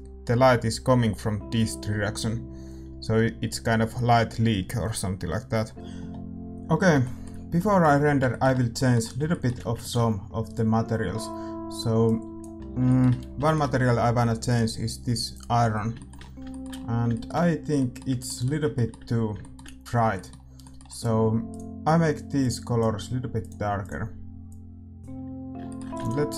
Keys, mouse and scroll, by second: 5.7 ctrl+s, 9.0-12.0 middle drag, 12.0 ctrl+s, 12.0-25.3 drag.